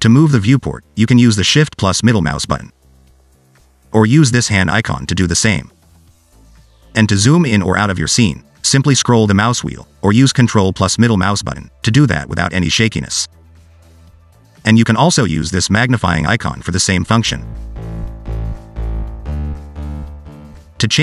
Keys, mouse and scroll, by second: 2.1 shift+middle click, 5.5 click, 8.8-9.4 scroll down 4, 9.4-11.0 scroll up 5, 11.0-11.9 scroll down 3, 12.3 ctrl+middle click, 16.0 click.